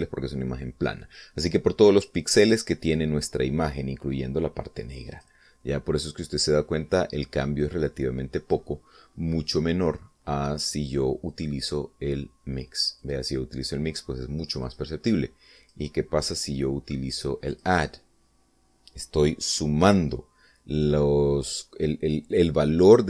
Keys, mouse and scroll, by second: 6.0 click, 8.5-9.5 drag, 12.2 click, 13.9 click, 15.5 click, 16.4 click, 17.1 click, 18.3 click.